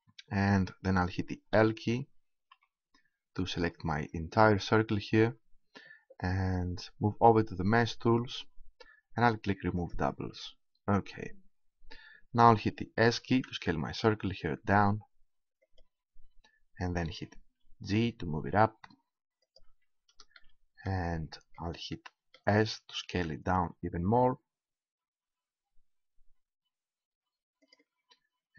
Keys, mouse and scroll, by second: 0.4-1.4 middle drag, 1.4 l, 2.5 l, 9.8-11.4 drag, 13.2 s, 15.8-17.4 drag, 17.5 g, 19.6-21.7 drag, 23.0 s, 27.7 click.